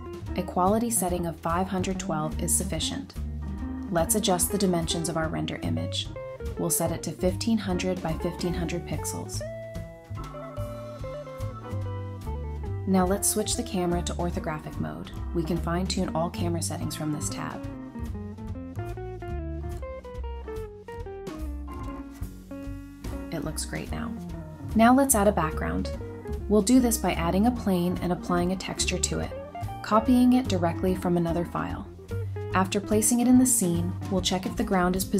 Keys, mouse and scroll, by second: 0.5-1.2 typing, 1.4 scroll down 1, 2.6-4.2 typing, 5.5-6.5 scroll up 1, 6.5-8.7 typing, 6.9 Return, 9.1 Return, 10.0 scroll down 1, 11.3 double click, 12.1-12.5 scroll down 1, 15.9-16.6 typing, 18.5 typing, 18.7 Return, 19.7 Return, 19.9-20.8 typing, 22.7 typing, 24.3 typing, 24.6 Return, 24.9 alt+h, 27.7 ctrl+c, 29.6 ctrl+v, 30.5 typing, 31.9 typing, 33.2 typing, 34.3 Escape.